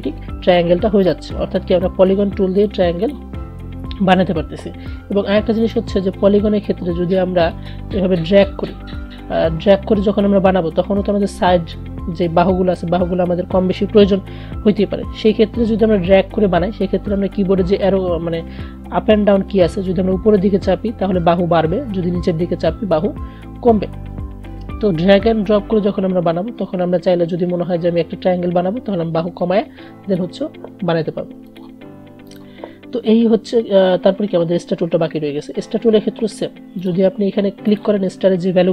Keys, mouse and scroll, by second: 5.7-17.5 drag, 20.1 Up, 29.9 Down, 31.7 click, 32.3 right click, 36.9 click.